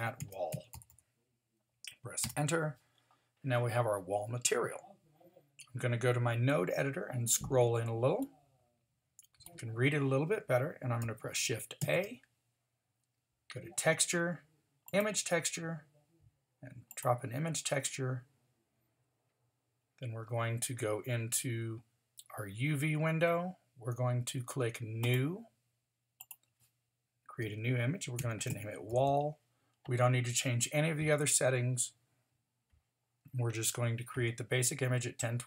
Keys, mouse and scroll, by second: 0.9 l, 6.8-8.2 middle drag, 11.8 shift+a, 29.0 l.